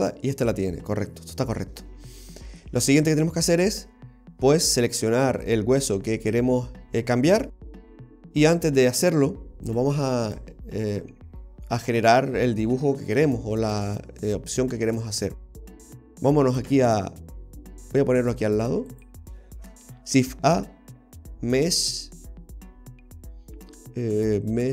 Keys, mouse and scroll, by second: 0.0 right click, 5.4 right click, 9.7 click, 10.9-11.4 scroll down 4, 11.4 middle click, 16.7 KP_7, 18.9 click, 20.2 shift+a.